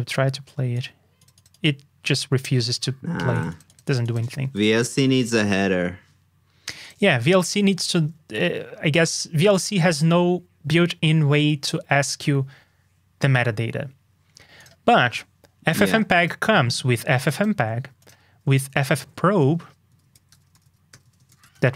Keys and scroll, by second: 2.3 ctrl+alt+super+s, 7.9 super+q.